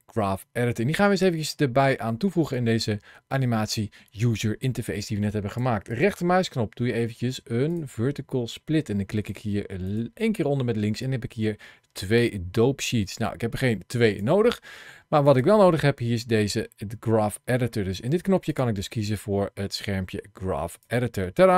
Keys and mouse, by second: 2.4-5.5 drag, 5.8-9.8 right drag, 10.9-14.0 drag, 15.1-17.8 drag, 18.4-20.7 drag.